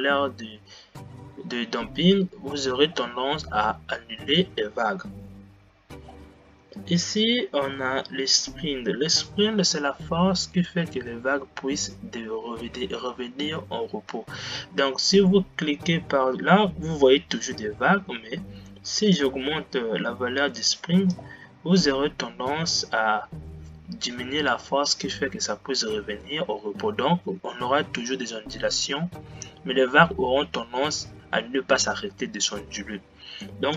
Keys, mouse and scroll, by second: 1.3-1.6 scroll down 4, 6.0-6.3 scroll down 5, 19.3-23.0 drag.